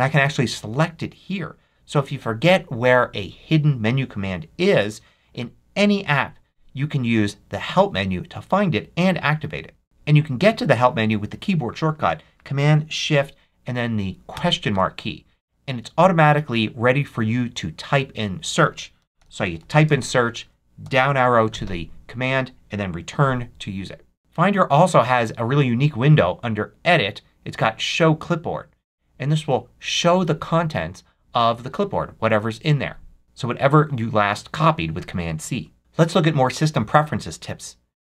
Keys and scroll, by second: 14.2 shift+super+/, 18.7-20.0 typing, 20.7 Down.